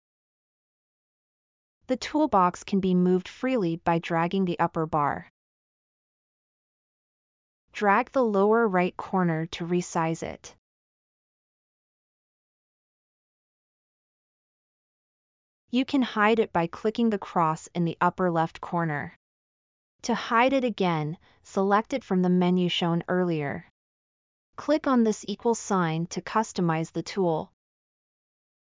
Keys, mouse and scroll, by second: 1.7 click, 8.8-15.1 drag, 16.4 click.